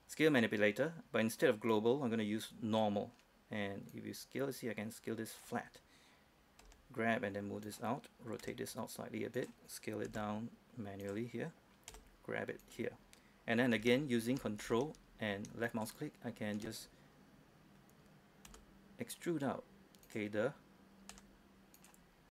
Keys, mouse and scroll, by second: 6.9 g, 7.9 click, 8.7 r, 9.7 click, 10.4 s, 11.3 click, 12.2 g, 12.9 click, 14.7 scroll down 1, 15.9 ctrl+click, 18.8 s, 20.4 click, 21.5 r, 22.1 click.